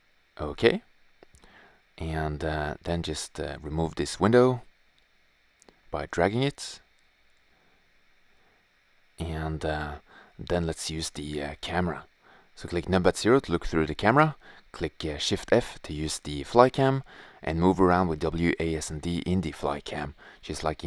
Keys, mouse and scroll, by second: 3.3-4.4 drag, 9.0 shift+z, 10.8 Tab, 12.0 KP_0, 13.5 shift+f, 19.4 middle click, 19.8 s.